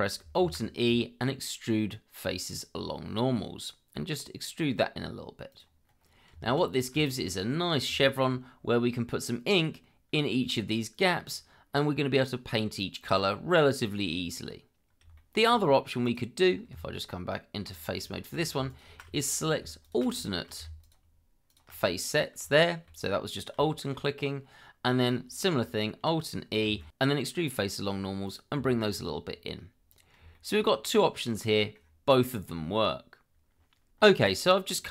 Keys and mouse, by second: 0.4 alt+e, 5.5 click, 6.3 Tab, 7.1 shift+middle drag, 8.0 shift+middle drag, 15.1 shift+middle click, 16.0 click, 16.7 Tab, 18.1 shift+middle click, 18.7 alt+click, 19.2 shift+middle click, 19.8 alt+shift+click, 20.2 shift+middle click, 20.8 alt+shift+click, 21.5 alt+shift+click, 22.5 shift+middle click, 23.6 shift+middle click, 26.6 alt+e, 29.4 click, 29.6 Tab, 30.6 click, 30.9 middle drag, 31.5 middle click.